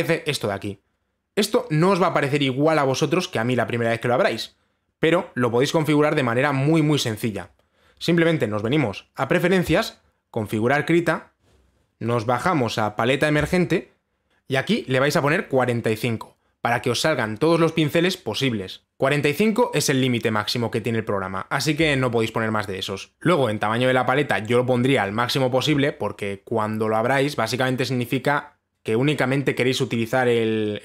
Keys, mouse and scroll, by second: 9.3-10.3 drag, 12.1 scroll, 14.0 click, 25.6 click.